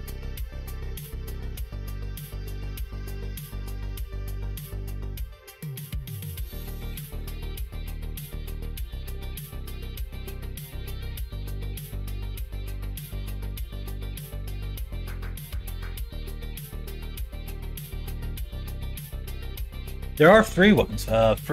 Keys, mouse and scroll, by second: 1.1 f, 2.1 ctrl+z, 3.8 click, 5.4 middle click, 6.2 click, 7.3 shift+click, 7.6 middle click, 9.1 f, 10.4 click, 11.0 click, 13.0 f, 14.6 shift+click, 15.5 f, 16.2 click, 17.5 f, 18.3 middle click, 18.8 middle click, 19.4 middle click, 19.9 middle click.